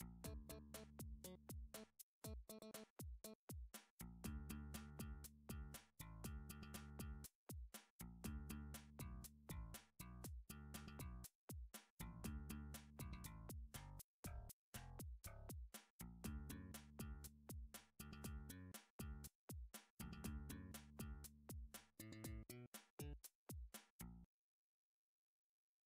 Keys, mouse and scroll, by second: 0.3 scroll, 0.6 scroll up 3, 1.5 shift+middle click, 1.8-2.2 scroll down 2, 3.0 shift+middle click, 3.6 middle click, 3.7 middle click, 4.1 middle click, 4.9 shift+middle click, 7.0 Tab, 7.9 scroll, 8.5 click, 10.1 e, 13.5 click, 13.7 e, 16.2 click, 16.4 e, 21.2 click, 22.6 alt+s.